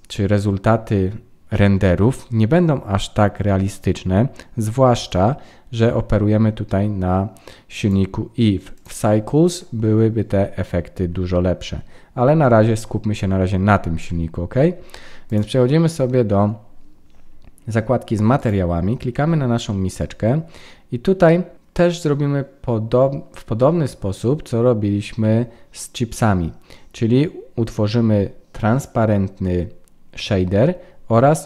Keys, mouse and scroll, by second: 5.0 click, 7.7 click, 9.4 click, 15.2 click, 18.4 click.